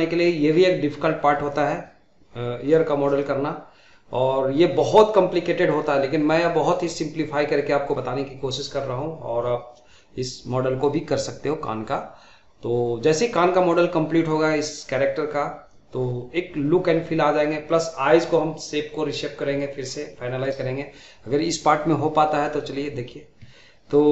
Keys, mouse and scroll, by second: 0.1 middle click, 0.2 click, 0.4 middle click, 0.6 middle click, 0.8 middle click, 1.0 click, 1.1 middle click, 1.4 g, 1.6 scroll down 1, 1.6 middle click, 1.7 g, 2.0 middle click, 2.1 g, 2.3 middle click, 2.5 click, 3.0 middle click, 3.0-4.3 drag, 4.3 middle click, 4.5 click, 4.7 middle click, 4.9 click, 5.0 scroll down 2, 5.1 middle click, 5.3 middle click, 5.8 middle click, 6.0 scroll up 2, 6.0 shift+middle click, 6.2 click, 6.4 middle click, 6.8 middle click, 7.3-8.3 typing, 7.4 middle click, 7.6 middle click, 7.9 click, 7.9 middle click, 8.1 scroll down 1, 8.1 middle click, 8.3 middle click, 8.6 click, 8.7 middle click, 8.8 scroll down 1, 8.8 shift+middle click, 9.0 scroll up 2, 9.1 shift+middle click, 9.4 click, 9.5 middle click, 9.7 middle click, 10.1 click, 10.2 scroll down 3, 10.3 shift+middle click, 10.5 Tab, 10.6 middle click, 10.6 scroll up 3, 10.7 middle click, 10.9 shift+middle click, 11.0 click, 11.1 middle drag, 11.3 scroll down 1, 11.3-11.7 shift+middle drag, 11.7 click, 11.9 KP_1, 12.0 shift+z, 12.2 scroll up 1, 12.3 shift+middle click, 12.3 scroll down 2, 12.4 shift+middle click, 12.9 click, 13.3 middle click, 14.2 middle click, 14.2 scroll up 4, 14.4 shift+z, 14.5 shift+middle click, 14.7 scroll down 5, 14.8 shift+middle click, 15.2 click, 15.6 middle click, 15.6 scroll up 4, 15.7 shift+middle click, 15.9 shift+middle click, 16.0 Tab, 16.1 click, 16.2 middle click, 17.2 click, 18.0 scroll down 4, 18.0 middle click, 18.2 click, 18.4 shift+middle click, 18.5 click, 18.6 Tab, 18.7 scroll down 1, 18.9 middle click, 19.4 scroll up 3, 19.5 shift+middle click, 19.5 click, 19.6 shift+middle click, 19.9 click, 19.9 shift+middle click, 20.1 Tab, 20.3 2, 20.3 scroll down 3, 20.4 middle click, 20.5 a, 20.6 shift+middle click, 20.8 scroll up 1, 21.1 click, 21.2 scroll down 1, 21.2 middle click, 21.3 scroll up 1, 21.4 shift+middle click, 21.5 scroll down 1, 21.6 shift+middle click, 22.2 click, 22.3 scroll down 1, 22.4 middle click, 22.4 scroll up 2, 22.5 shift+middle click, 22.5 click, 22.6 middle click, 22.7 Tab, 22.7 scroll down 1, 22.8 shift+middle click, 22.9 scroll up 1, 22.9 scroll down 1, 23.1 shift+middle click, 23.1 click, 23.2 middle click, 23.7-24.0 middle drag, 23.7-24.1 scroll up 2.